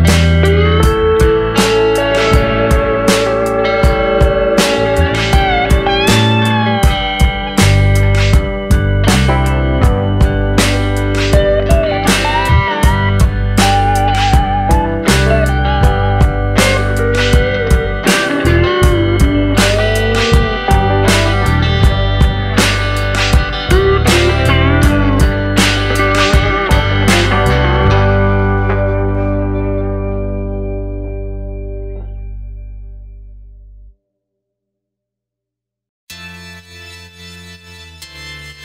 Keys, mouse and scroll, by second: 0.0 click, 4.7 Tab, 5.2-5.7 scroll down 2, 5.7 Tab, 6.2-6.6 scroll down 2, 6.6 middle click, 7.4 shift+middle click, 8.4 middle click, 12.0-12.7 scroll up 3, 12.9 shift+middle click, 13.5-14.3 scroll up 2, 14.3-15.2 scroll down 1, 17.2 click, 19.5 g, 23.8 click, 24.0 g, 26.2 click, 26.4 g, 28.5 click, 28.7 g, 31.2 middle click, 32.0-32.7 scroll down 3, 32.4 middle click, 34.1 scroll up 1, 35.1 Tab, 35.5-36.5 scroll down 3, 36.9 alt+h, 37.5-38.1 scroll down 3.